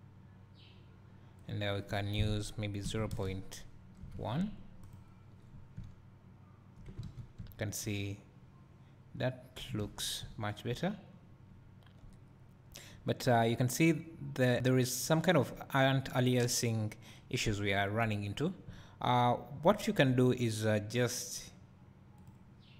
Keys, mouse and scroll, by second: 5.9 middle click, 7.1 a, 11.2 scroll down 1, 14.1 scroll up 1, 17.3 scroll down 1.